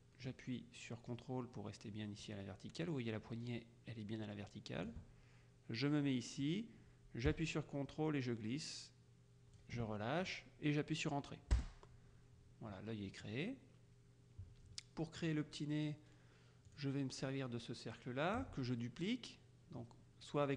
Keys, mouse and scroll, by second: 6.5-10.2 drag, 11.6 Return, 13.2 click, 15.3 click, 16.8 click.